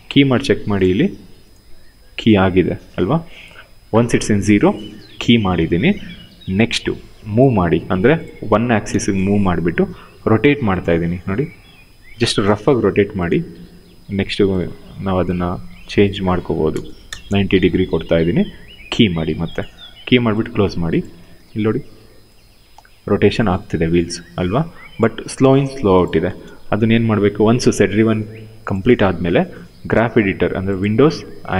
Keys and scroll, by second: 5.2 w, 8.5 1, 8.6 Return, 13.5 e, 16.3 9, 16.7 Return, 20.8 w, 25.8 0, 26.0 Return.